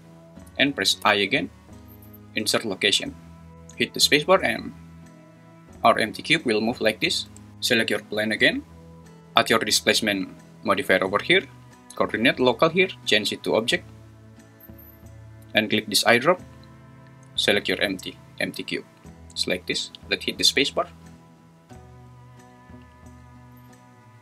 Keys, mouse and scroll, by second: 3.5 space, 7.3 space, 12.4-14.9 drag, 20.5 space.